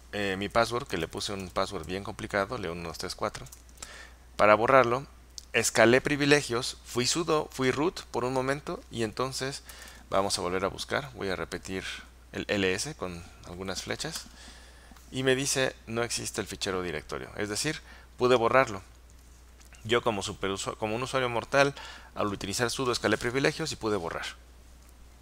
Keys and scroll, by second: 0.7-2.4 typing, 3.5 Return, 9.5-10.4 typing, 10.7 Up, 11.0 Up, 14.2 Return.